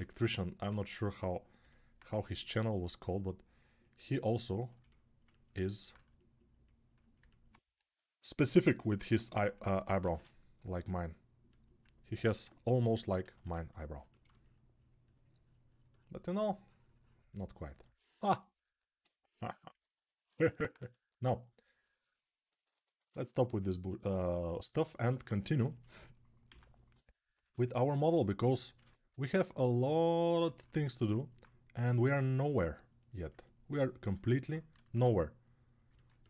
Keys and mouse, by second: 0.4-1.7 right drag, 9.8 shift+r, 10.8-13.3 drag, 13.3 ctrl+r, 20.5-25.0 shift+drag, 26.3 x, 26.7 [, 27.2 [, 27.3 [, 28.5 1, 33.9-36.2 alt+right drag, 34.7 3.